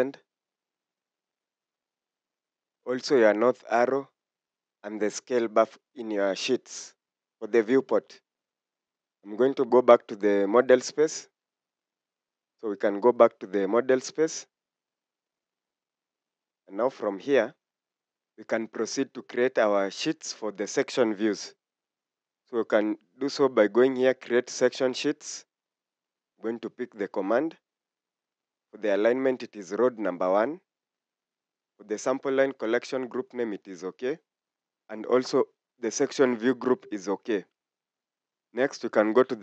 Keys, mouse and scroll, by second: 8.0 Escape, 8.6 Escape, 15.8-16.6 scroll down 1, 16.7 Escape.